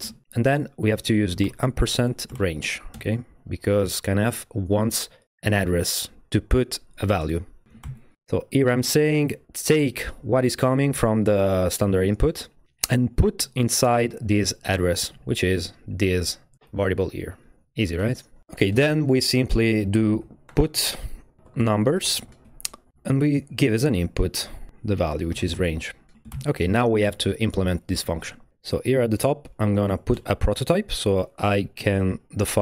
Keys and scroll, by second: 0.0-0.4 typing, 1.4-2.9 typing, 2.9 Return, 7.7 Right, 7.8 shift+,, 20.0-22.9 typing, 23.8 Left, 24.9-26.3 typing, 30.1 Return, 30.3 Return, 31.5 Up.